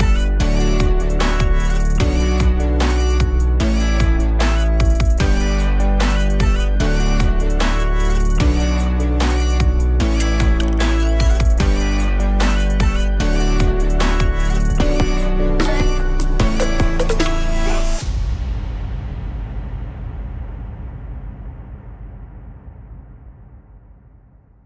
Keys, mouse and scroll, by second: 0.2 scroll down 1, 0.7-3.2 drag, 4.7-8.5 drag, 9.3 click, 10.6 middle click, 11.6 scroll down 2, 12.2 middle click, 12.7-13.1 scroll up 1, 13.1 middle click, 13.9-14.6 scroll up 1, 14.6-15.8 middle drag, 15.8-18.3 drag, 21.6-24.4 drag, 24.4-24.6 scroll down 1.